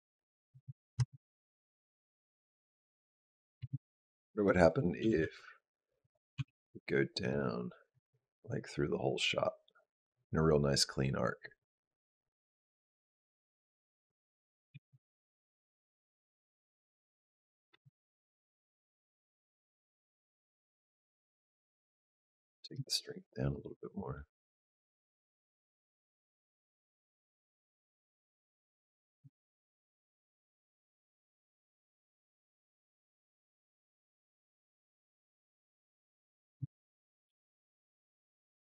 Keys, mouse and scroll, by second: 0.4 space, 0.8 space, 3.4 space, 4.3 click, 4.8 g, 6.2 g, 7.8 click, 14.5 g, 16.5 g, 17.5 space, 22.5 click, 36.3 space, 37.1 g.